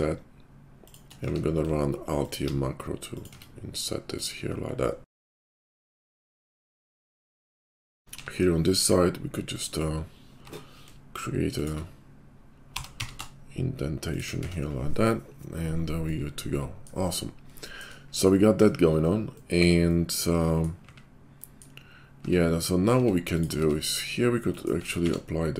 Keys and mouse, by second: 1.2 q, 1.4-23.3 middle drag, 3.3 Tab, 6.5 Tab, 8.2 i, 10.4 i, 12.6 g, 14.3 Tab, 22.2 Tab, 22.9 Tab, 23.3 click, 23.4-25.5 middle drag, 23.5 Tab, 24.8 Tab, 25.0 q.